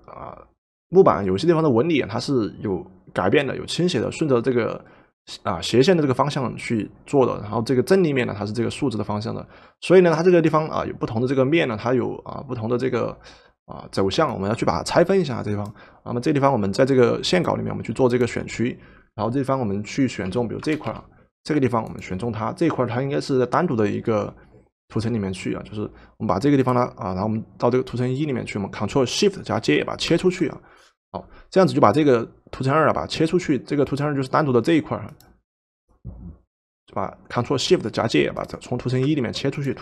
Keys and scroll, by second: 20.3 w, 21.0 w.